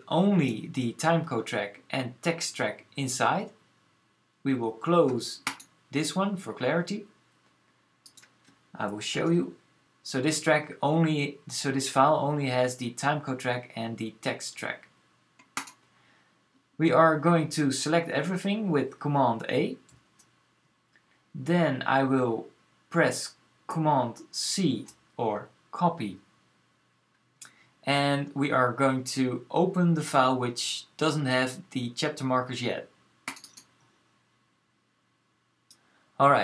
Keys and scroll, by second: 8.9 super+j, 19.7 super+a, 24.4 super+c.